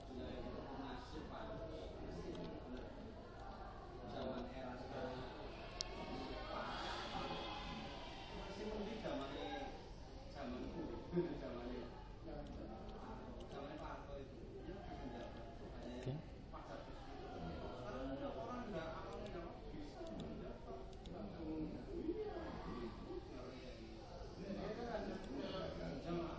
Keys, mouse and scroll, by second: 1.4 middle click, 2.9-6.4 middle drag, 6.4 g, 10.8 click, 13.0-18.2 middle drag, 18.2 Tab, 20.2 right click, 21.6-22.6 drag, 25.3 click.